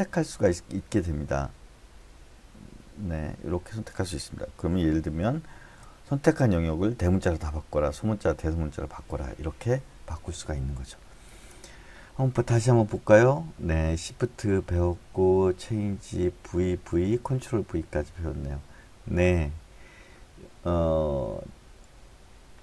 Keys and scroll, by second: 5.5 shift+`.